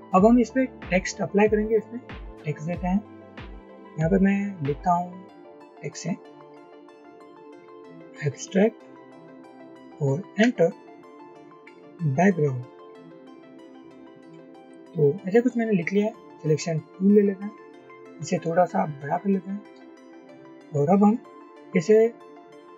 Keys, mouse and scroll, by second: 6.2-9.1 typing, 10.5 Return, 11.2-14.4 typing, 19.0 shift+click.